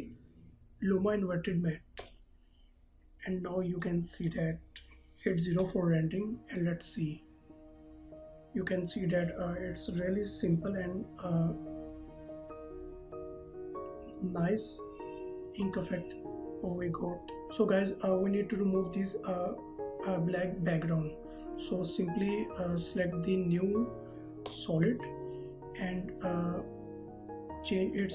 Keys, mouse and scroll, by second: 5.7 KP_0, 22.0 right click, 24.6 click.